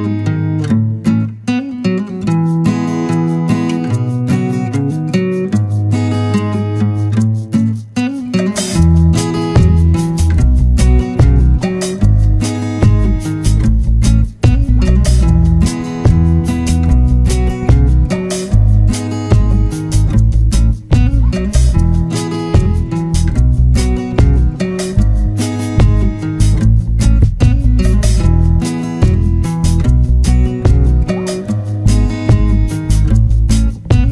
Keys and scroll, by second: 1.1 ctrl+-, 6.6 ctrl+z, 14.3 ctrl+0, 16.3 ctrl+-, 17.7 ctrl+z, 20.3 Return.